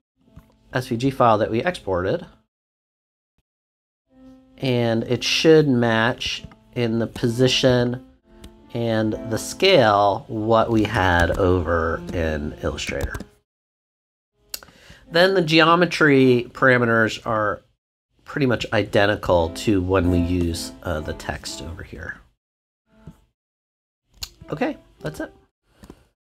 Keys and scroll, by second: 11.2 super+Tab, 13.0 super+Tab.